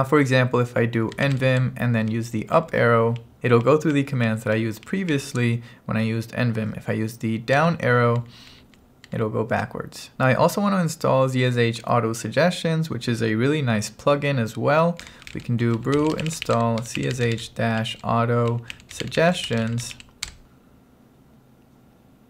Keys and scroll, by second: 1.0-1.9 typing, 2.6 Up, 3.3 Up, 4.6 Up, 5.2 Up, 7.6 Down, 8.5 Down, 9.3 Down, 10.1 BackSpace, 14.8-20.3 typing, 20.4 Return.